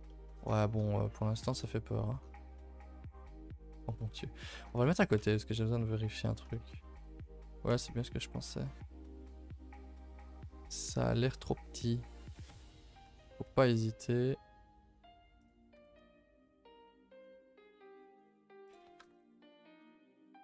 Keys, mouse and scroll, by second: 0.8-1.4 scroll up 2, 1.4 KP_0, 2.1-2.6 scroll down 6, 2.6 shift+middle drag, 2.8-3.6 scroll up 1, 3.6 click, 4.6 g, 6.5 shift+middle drag, 6.7-7.0 scroll up 2, 7.0-7.4 middle drag, 7.4 g, 9.1 click, 9.5 Tab, 9.8 a, 10.0 a, 11.0 l, 12.3 s, 13.5 s, 15.8 r, 19.0 r.